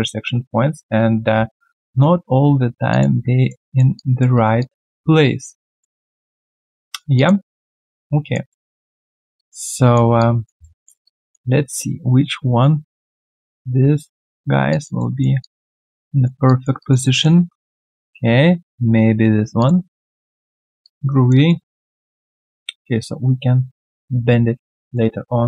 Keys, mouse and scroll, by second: 0.1 ctrl+z, 0.7 ctrl+z, 2.9 ctrl+click, 3.4 alt+right click, 3.6 alt+middle click, 3.9 alt+click, 4.3 alt+right click, 4.6 alt+click, 5.8 alt+middle click, 6.1 alt+scroll down 1, 6.5 alt+click, 6.8 alt+right click, 7.1 alt+click, 7.4 alt+middle click, 7.8 alt+click, 8.5 alt+middle click, 9.3 alt+click, 10.6 alt+middle click, 11.0 alt+click, 14.7 alt+click, 14.9 alt+middle click, 15.4 alt+click, 16.0 alt+right click, 16.4 alt+click, 16.8 alt+right click, 17.0 alt+middle click, 19.5 ctrl+click, 20.0 alt+right click, 20.4 alt+middle click, 20.8 alt+click, 21.1 alt+right click, 21.4 alt+middle click, 21.8 alt+right click, 22.1 alt+middle click, 24.8 alt+right click.